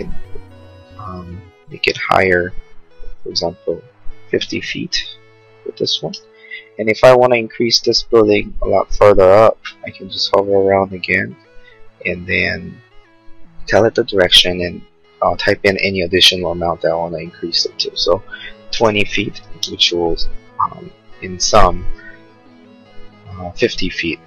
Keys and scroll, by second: 4.6 0, 17.7-18.7 typing, 19.0 Return.